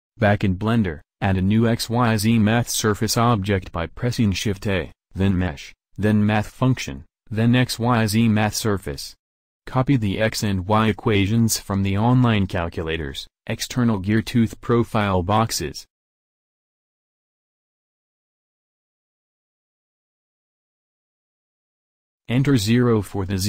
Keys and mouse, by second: 1.3 shift+a, 9.7 click, 12.5 alt+Tab, 14.7 alt+Tab.